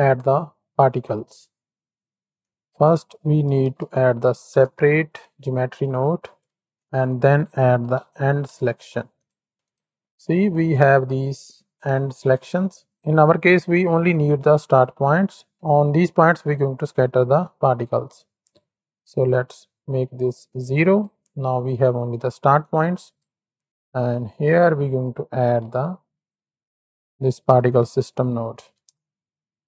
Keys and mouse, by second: 0.6 middle click, 2.3-6.0 drag, 6.3 middle click, 6.5 shift+a, 9.5 ctrl+shift+x, 9.6 ctrl+shift+click, 10.4 ctrl+shift+click, 11.4 click, 18.8 click, 19.9-21.0 drag, 21.6 drag, 22.6-23.1 drag, 23.8 ctrl+shift+click, 24.2 click, 25.6 x, 26.2-29.6 drag.